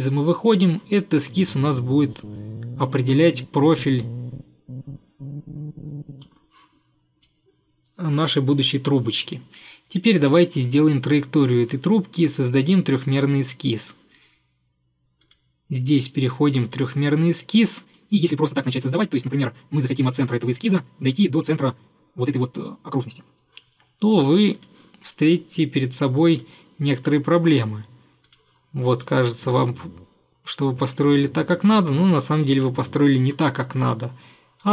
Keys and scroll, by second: 33.6 Escape.